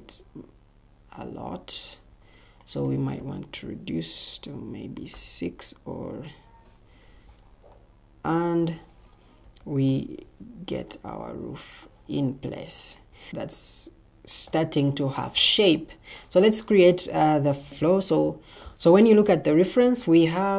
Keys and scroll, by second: 4.9 6, 5.0 Return, 6.9 Escape, 9.3 typing.